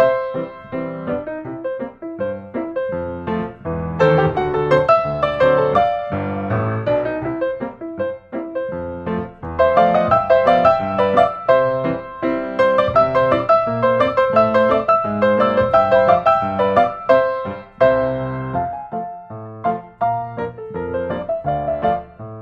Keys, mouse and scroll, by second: 0.2 click, 0.8-2.1 middle drag, 0.8-1.3 scroll, 3.2-5.2 scroll, 8.0 click, 9.8-10.9 middle drag, 10.9-12.0 drag, 12.1 n, 13.8 n, 16.8 click, 17.7 middle click, 18.3 s, 19.3 Escape, 20.6-21.3 drag, 21.3 s.